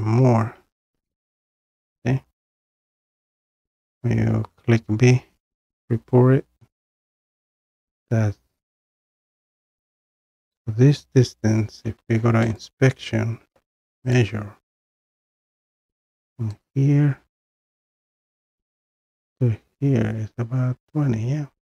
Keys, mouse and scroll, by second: 0.9 b, 1.2-1.7 drag, 3.0-5.2 middle drag, 3.0-3.9 scroll up 2, 3.9-5.1 scroll up 1, 5.1 scroll up 1, 5.1 b, 9.3 scroll, 12.6 click, 14.1 click, 16.6 click, 17.6-21.7 drag.